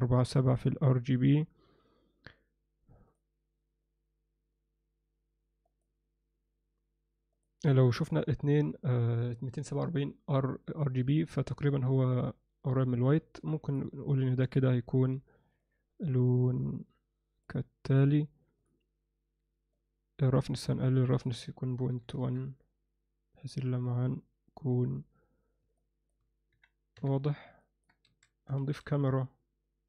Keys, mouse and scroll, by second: 13.2 ctrl+alt+middle click, 13.7 click, 14.4-14.7 drag, 18.6 click, 19.8 click, 21.1-22.9 drag, 24.0 click, 25.8 alt+middle click, 27.0 KP_1, 27.6 ctrl+alt+middle drag, 28.1 alt+a, 28.6 shift+a.